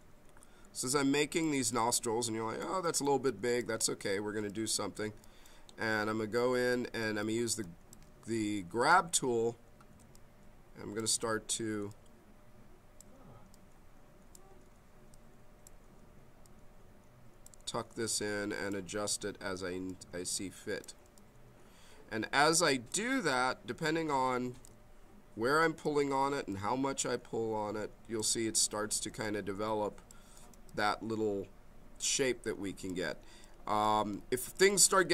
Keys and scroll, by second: 10.0 b, 24.5 b.